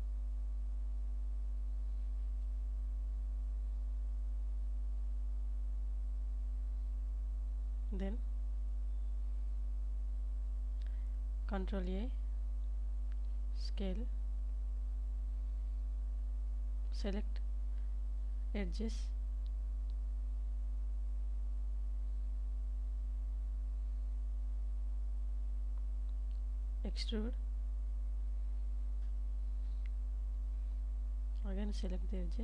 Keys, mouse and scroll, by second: 2.2 click, 3.2 KP_Decimal, 4.7 s, 5.1 z, 7.5 click, 9.2 ctrl+a, 14.2 Tab, 15.6 KP_7, 17.5 middle click, 20.3 2, 24.5 e, 25.3 s, 28.1 click, 28.7 KP_1, 30.3 alt+z, 31.0 alt+z, 31.7 middle click.